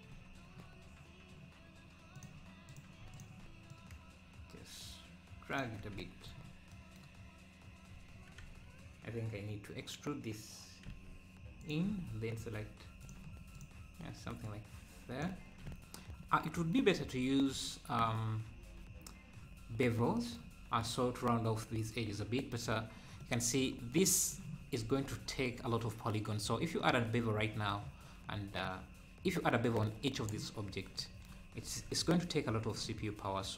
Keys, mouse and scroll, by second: 0.1 Tab, 2.2-5.7 drag, 5.7 Tab, 6.4 scroll up 2, 7.9 Tab, 10.9 e, 13.0-15.3 drag, 15.3 Tab, 15.6 `, 16.9 scroll up 3, 17.2 `, 18.5 `, 22.8-23.2 scroll down 3, 23.2 middle click, 24.0 middle click, 24.9 ctrl+s, 25.4-25.8 scroll down 1, 25.8-26.3 scroll up 7, 26.3-26.8 scroll down 1, 26.8-28.1 middle drag, 28.1-28.5 scroll up 2, 30.7 scroll down 1, 31.6 ctrl+s.